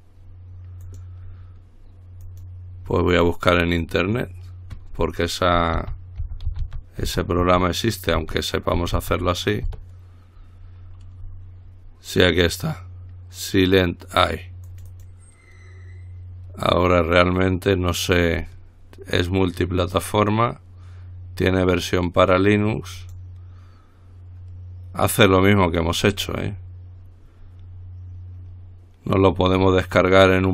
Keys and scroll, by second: 6.0-9.2 typing, 9.9 Return, 12.4 typing.